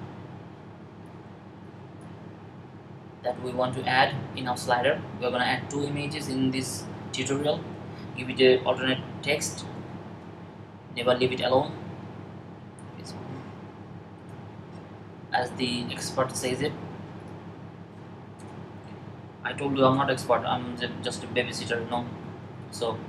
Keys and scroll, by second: 9.1-10.1 typing, 11.3 typing, 12.8 typing.